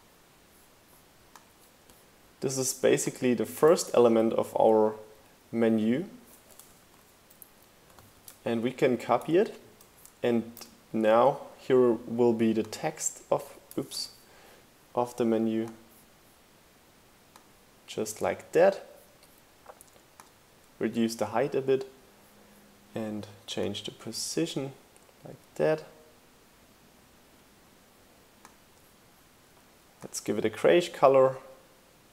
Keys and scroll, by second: 3.7 super+v, 6.7 super+z, 7.8 super+c, 8.0 super+v, 8.2 shift+Right, 10.6 shift+Left, 11.0 Right, 13.8 super+z.